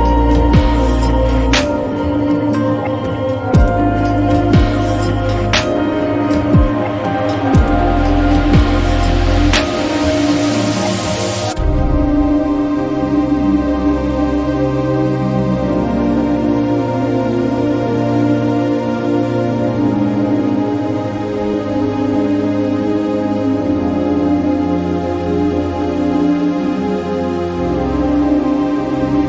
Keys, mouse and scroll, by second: 1.2-2.1 middle drag, 2.6 click, 4.6 click, 5.9 click, 8.1 click, 9.8-10.7 middle drag, 12.1-13.7 drag, 14.7 click, 17.8 alt+drag, 20.9 r, 21.6 z, 25.2-25.8 drag, 26.5 click, 27.7 e, 29.0 e.